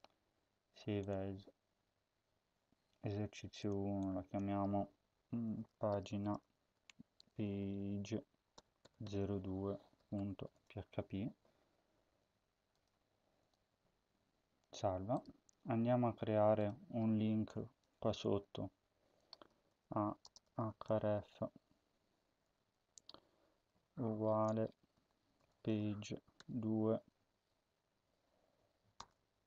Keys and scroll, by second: 5.2-11.0 typing, 17.6 Return, 17.8 Return, 19.4-21.2 typing, 23.0-26.2 typing, 24.8 Left, 26.8 Right.